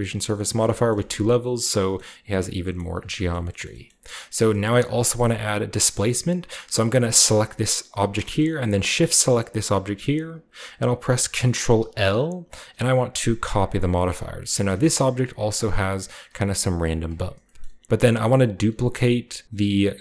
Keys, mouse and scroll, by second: 0.6-2.5 scroll up 2, 1.0 Tab, 1.4 shift+middle click, 2.0 shift+middle click, 2.5 shift+scroll down 1, 2.8 middle click, 2.8 ctrl+2, 3.4 shift+middle drag, 3.4 shift+scroll down 1, 3.5 typing, 4.3-5.0 shift+scroll down 2, 4.7-5.5 typing, 5.0-6.5 shift+middle drag, 7.3 g, 7.7-8.2 drag, 8.2-11.0 shift+right drag, 8.3-10.1 shift+scroll up 1, 9.2 shift+middle click, 11.8 ctrl+l, 13.4 middle click, 14.2 a, 14.4-15.5 shift+drag, 14.4-16.4 shift+middle drag, 14.9-16.4 shift+scroll up 1, 17.5 shift+middle click.